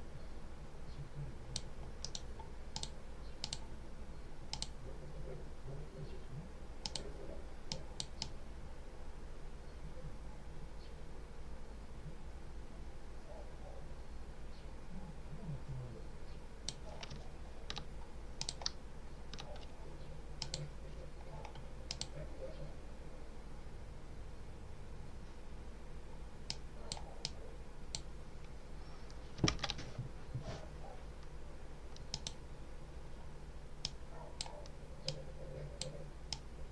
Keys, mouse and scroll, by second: 1.9 right click, 2.6 click, 3.3 click, 4.4 click, 6.7 click, 7.6 click, 11.3-16.8 drag, 18.3 ctrl+click, 18.7-19.2 ctrl+scroll up 1, 20.3 click, 21.8 click, 26.4 click, 27.1-28.0 drag, 29.4 ctrl+z, 32.0 click, 33.7 click, 35.0 click, 36.2 click.